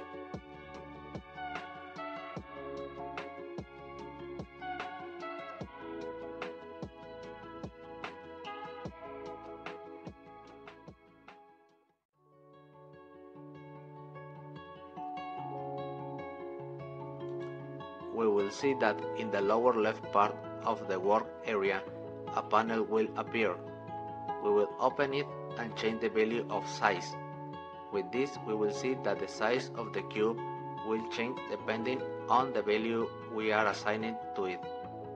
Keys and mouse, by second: 1.2-3.0 drag, 12.0-16.0 drag.